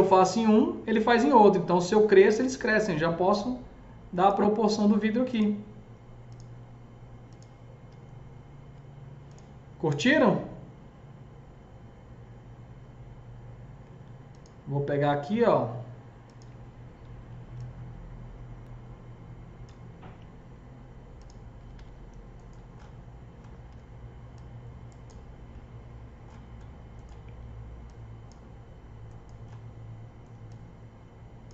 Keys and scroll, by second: 7.8 F3, 8.5 F4, 21.2-22.2 typing, 23.5 F3.